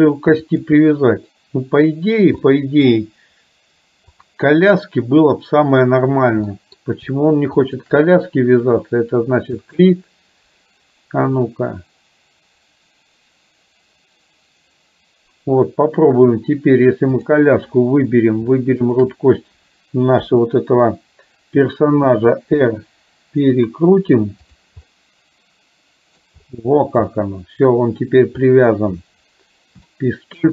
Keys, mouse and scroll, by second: 0.6 click, 2.6-3.0 middle drag, 4.2 click, 6.6 middle click, 7.6 shift+click, 9.7 click, 11.5-16.2 drag, 18.9 shift+click, 20.2 KP_7, 22.2 r, 25.0-26.4 middle drag, 27.2-28.2 middle drag, 30.0 shift+middle click.